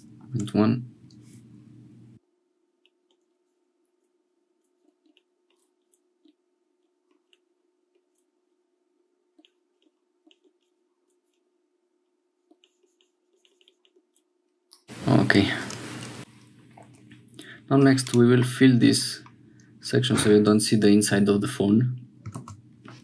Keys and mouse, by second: 2.8 middle click, 3.9 middle click, 4.8 Tab, 5.0 Tab, 5.1 click, 7.3 click, 12.7-13.9 shift+middle drag, 14.1-18.4 drag, 18.4 middle click, 22.4 alt+s.